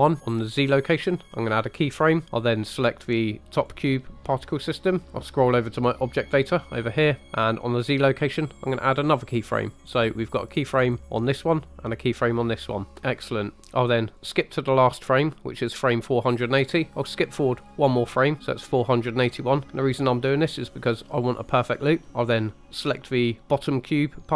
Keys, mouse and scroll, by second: 1.5 click, 3.5 click, 9.0 click, 10.2 click, 11.0 click, 11.9 click, 13.6 click, 14.2 click, 17.6 click, 22.8 click.